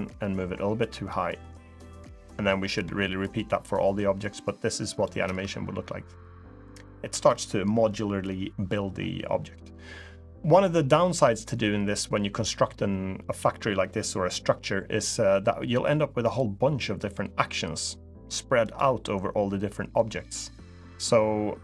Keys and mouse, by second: 3.5-4.8 drag, 5.6 space, 7.4 space, 16.1-16.9 drag.